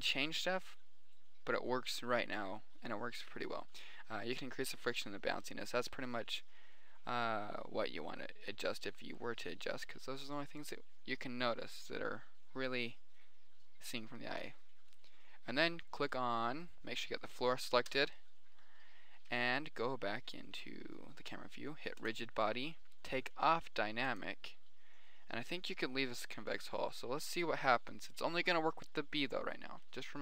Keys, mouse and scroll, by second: 7.1-8.3 middle drag, 15.3-16.1 right drag, 17.3 middle drag, 17.9 click, 18.3 KP_0, 19.1 middle click, 20.3-20.9 middle drag, 22.4-24.1 drag, 24.6-26.3 drag, 28.4 right click.